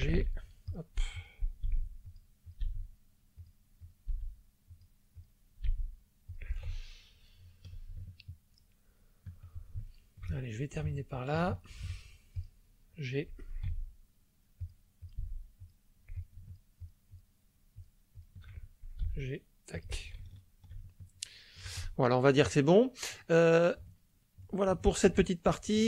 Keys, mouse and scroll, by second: 0.1 g, 0.6 click, 1.1 click, 1.6 g, 2.0 click, 2.4 click, 2.6 g, 3.4 click, 3.8 click, 4.1 g, 4.7 click, 5.7 g, 6.2 click, 6.7-7.8 ctrl+middle drag, 8.0 ctrl+shift+middle click, 9.8 shift+middle click, 10.4 ctrl+shift+middle click, 11.3 shift+click, 12.3 shift+click, 13.6 g, 14.6 click, 15.1 click, 15.2 g, 15.6 click, 16.1 click, 16.8 shift+click, 17.8 shift+click, 18.1 shift+click, 19.1 g, 19.7 click, 20.2 ctrl+middle click, 20.9 ctrl+shift+click, 22.7 scroll down 2, 23.2-23.5 scroll up 2, 23.9 shift+click, 24.7 shift+click, 25.4 shift+scroll up 2, 25.7 shift+click, 25.7 shift+middle click.